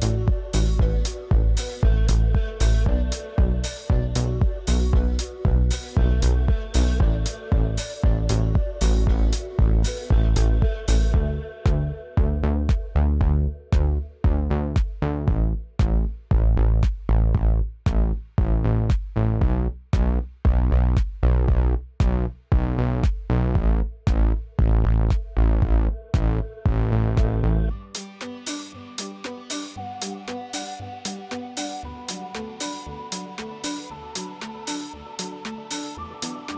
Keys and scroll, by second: 29.6 Delete, 30.9 ctrl+v, 31.0 space, 32.2 space, 33.5 space.